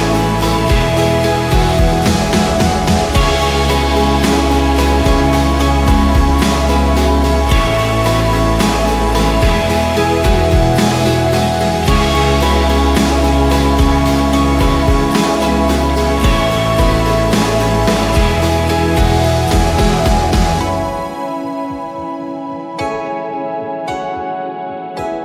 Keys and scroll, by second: 0.3 Return, 7.1 Return, 10.9 Return, 11.5 v, 18.1 5, 18.3 Return, 20.6-21.6 typing, 24.8 Return.